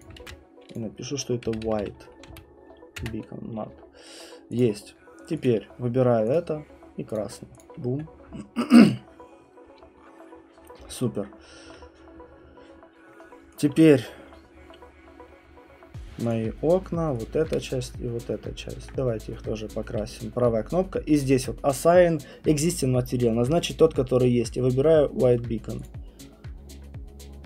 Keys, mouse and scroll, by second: 0.0 click, 0.2 ctrl+v, 0.7 click, 1.4 Delete, 4.6 Delete, 4.6 click, 5.4 click, 6.3 click, 7.2 click, 7.6 click, 12.3 middle click, 13.6 click, 25.2 right click, 25.8 click.